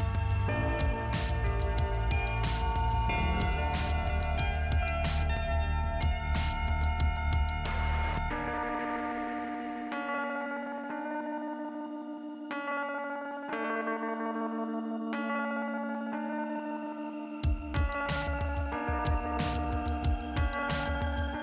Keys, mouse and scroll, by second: 1.5 click, 5.1 middle click, 5.8-6.5 scroll up 1, 7.5 click, 7.6 click, 8.8 click, 11.0 click, 11.1 click, 11.7 click, 11.8 click, 13.0 click, 14.2 click, 14.4 click, 14.5 click, 14.6 click, 15.3 click, 15.4 click, 15.5 click, 15.6 click, 19.1 click, 19.3 click, 19.9 middle click.